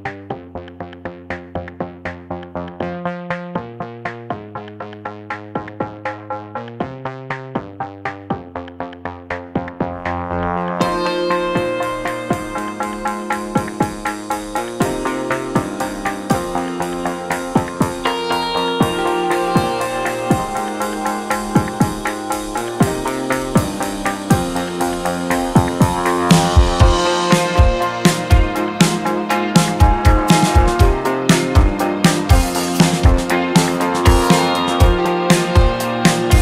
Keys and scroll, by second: 5.9 ctrl+z.